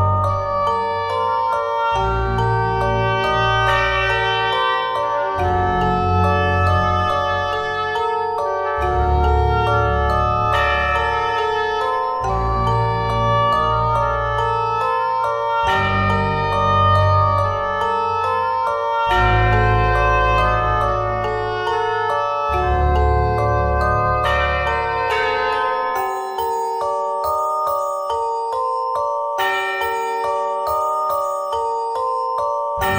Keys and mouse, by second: 0.5 ctrl+Tab, 1.7 f, 2.7 f, 3.4 f, 5.3 f, 7.3 f, 8.3 click, 9.0 ctrl+Tab, 10.2 click, 11.2 f, 11.7 ctrl+Tab, 13.2 click, 15.6 f, 16.1 f, 17.3 f, 18.1 ctrl+z, 21.1 f, 22.0 ctrl+Tab, 24.5 f, 24.9 ctrl+Tab, 31.6 click, 32.2 middle click.